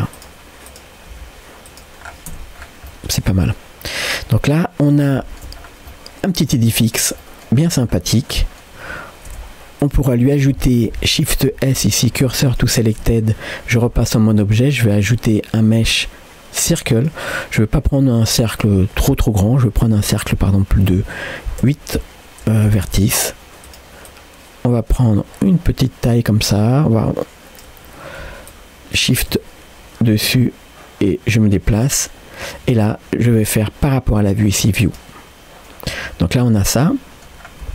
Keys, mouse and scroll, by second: 0.7 click, 1.2 g, 2.1 scroll down 1, 2.4 Tab, 2.6 scroll down 1, 2.9-4.9 middle drag, 5.2 shift+middle click, 5.6 scroll down 1, 5.9-7.0 middle drag, 7.2 middle click, 7.6 scroll up 2, 8.0 shift+middle click, 8.4 middle click, 9.3 Tab, 9.8 click, 11.5 shift+s, 13.0 Tab, 20.1-28.5 drag, 32.4-36.0 shift+drag, 36.0-36.3 scroll up 1, 36.7 middle click, 37.5 scroll down 1.